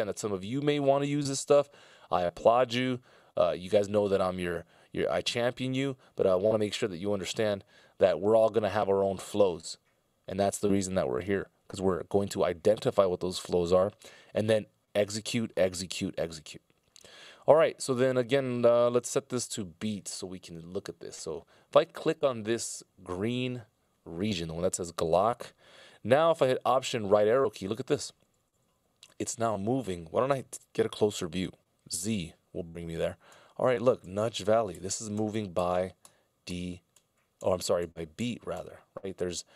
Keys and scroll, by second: 27.0 alt+Right, 27.7 alt+Right, 28.4 alt+Left, 31.9 z, 33.7 alt+Right, 34.6 alt+Left, 35.3 alt+Right, 35.7 alt+Right, 36.2 alt+Right, 36.7 alt+Right, 37.5 alt+Left, 38.2 alt+Left, 38.9 alt+Right, 39.3 alt+Left.